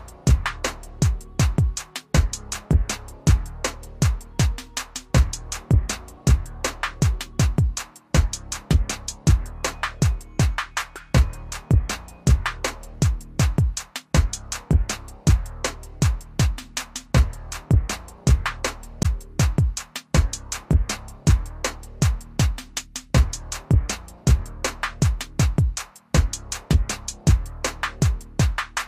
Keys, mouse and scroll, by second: 5.7 click, 13.3 click, 25.8-28.0 scroll down 1.